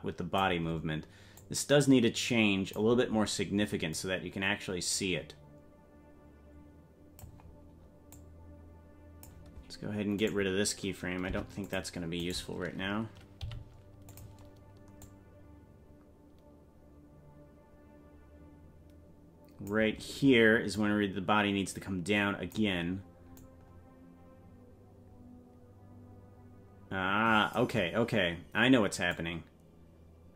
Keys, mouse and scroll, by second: 1.3-2.8 drag, 3.9-7.3 drag, 8.1-9.3 drag, 10.2 right click, 11.2 Delete, 12.3 right click, 13.4 g, 15.0-19.7 drag, 20.7-22.6 drag, 23.4-27.6 drag, 29.1-30.3 drag.